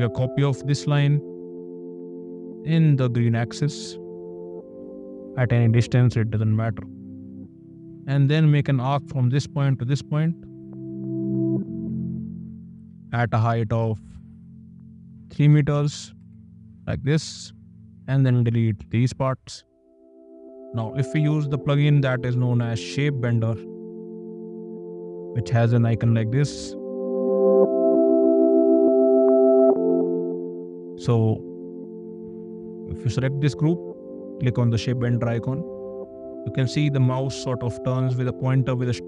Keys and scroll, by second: 0.0 m, 7.5 a, 12.1 Up, 13.2 KP_Decimal, 14.6 BackSpace, 15.7 KP_3, 16.2 Return, 16.8 space, 18.8 d, 21.4 ctrl+`, 22.3 s, 22.6 h.